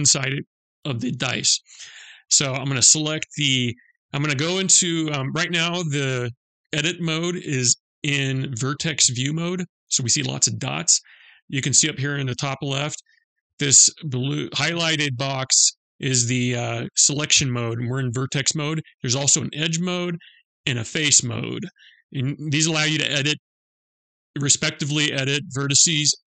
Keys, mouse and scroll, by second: 1.8 middle click, 18.7 click, 20.1 click, 25.6 click.